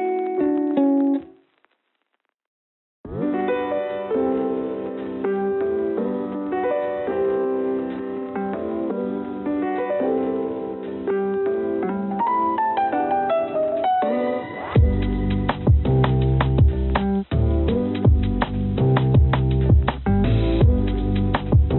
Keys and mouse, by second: 6.4 click, 8.9 click, 18.3-20.0 drag.